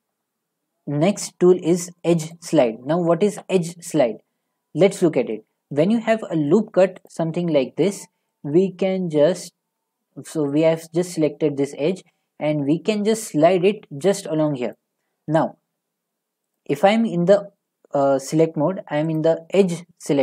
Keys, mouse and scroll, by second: 0.2 middle click, 2.3 scroll, 2.3 click, 4.5 middle click, 4.8 middle click, 4.9 middle click, 5.7 scroll, 6.5 middle click, 7.1 click, 7.1 scroll, 9.4 click, 14.8 click, 15.9 middle click, 15.9 middle click, 16.0 middle click, 16.6 click, 19.2 click.